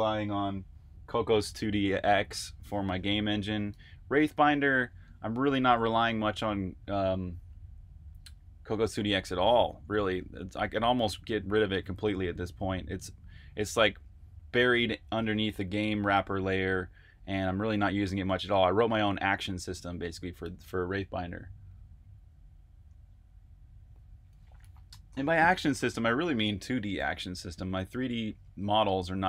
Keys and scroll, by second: 27.1-28.9 typing.